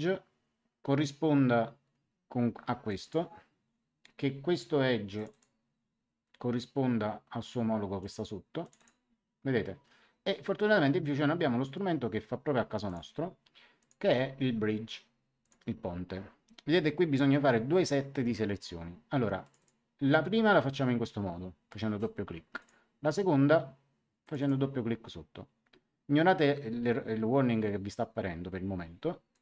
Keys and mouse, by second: 2.8 click, 5.1 click, 8.0 click, 12.8 click, 15.4 click, 19.4 click, 22.5 click, 24.2 click, 29.3 click.